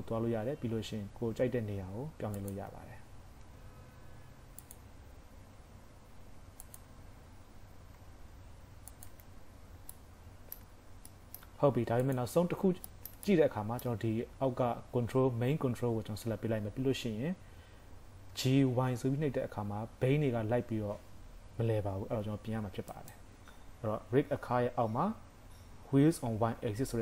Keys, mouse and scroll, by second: 0.4 KP_3, 1.2 g, 2.8 Tab, 3.4 Tab, 3.8 g, 4.8 Tab, 5.4 Tab, 5.9 g, 6.9 Tab, 8.0 Tab, 8.3 g, 9.1 Tab, 9.8 scroll down 1, 10.0 middle click, 11.1 shift+middle click, 12.0 click, 12.4 scroll up 3, 12.9 shift+middle click, 13.3 middle click, 17.2-18.1 scroll up 2, 18.1 g.